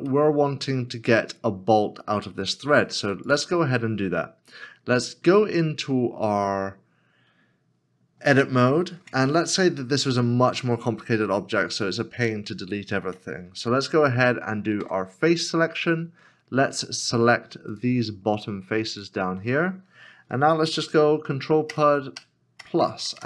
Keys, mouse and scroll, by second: 0.2 middle click, 1.8-3.0 scroll down 1, 6.4 scroll down 1, 9.0 Tab, 9.8 scroll up 1, 15.4 3, 15.5 middle click, 16.5 scroll up 1, 18.9 shift+l, 21.7 ctrl+[, 22.2 ctrl+KP_Add, 22.6 ctrl+KP_Add, 22.8 ctrl+KP_Add, 23.0 ctrl+KP_Add, 23.2 ctrl+KP_Add.